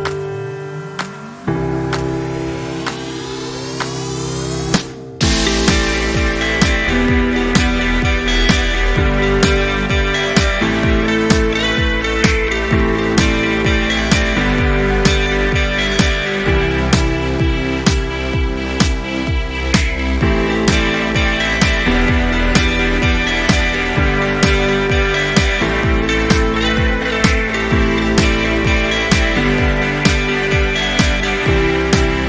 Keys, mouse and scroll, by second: 0.4 ctrl+c, 0.9 click, 1.4 ctrl+shift+v, 2.4-4.2 drag, 13.2 ctrl+scroll up 1, 13.6-14.2 drag, 29.8 ctrl+scroll down 1, 30.3 ctrl+scroll up 1, 31.5-32.2 drag.